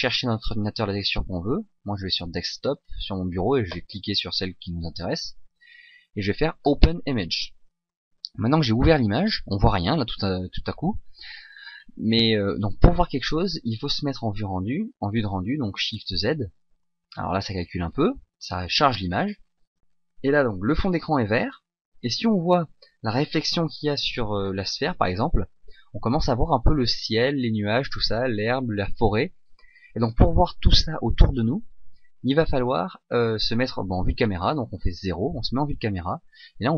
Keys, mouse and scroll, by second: 7.8 click, 11.7-15.3 scroll down 2, 16.1 shift+z, 24.2-24.5 scroll up 2, 34.6 KP_0.